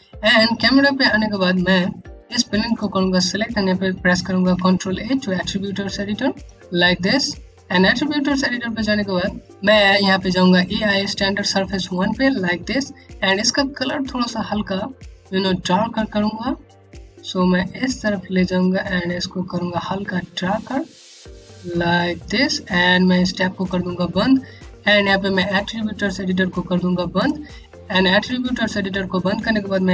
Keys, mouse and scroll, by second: 0.9 click, 1.2-1.5 scroll up 1, 1.5 scroll down 1, 2.2 click, 4.4 a, 5.9 click, 11.2 click, 26.7 click.